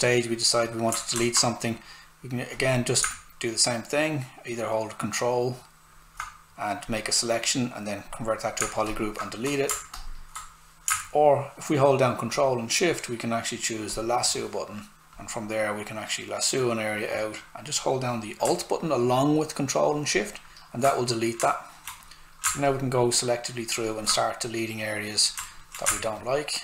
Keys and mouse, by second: 21.4 alt+right click, 22.0 click, 25.4 alt+right click, 26.1 ctrl+alt+shift+click.